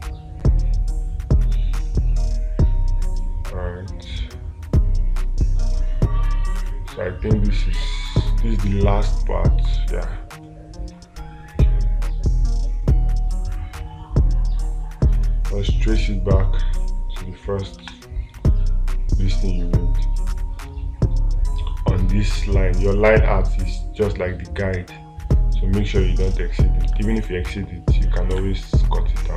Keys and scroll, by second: 18.2 space, 27.4 space, 28.8 space.